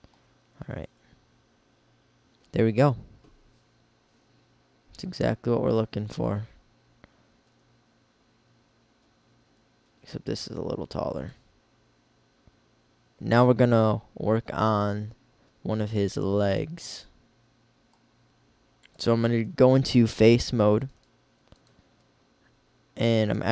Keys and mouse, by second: 0.6 KP_1, 7.5 g, 13.1 KP_1, 18.3-19.9 drag, 19.9 middle click.